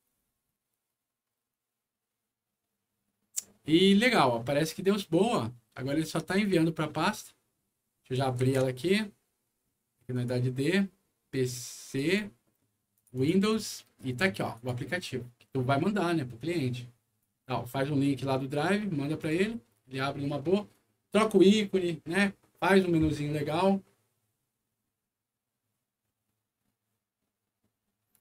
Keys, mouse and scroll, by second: 6.3 click, 8.3 super+e, 10.1 click, 11.8 click, 12.0 click, 12.9 click, 13.1 click, 14.5 click, 17.1 click, 19.1 click.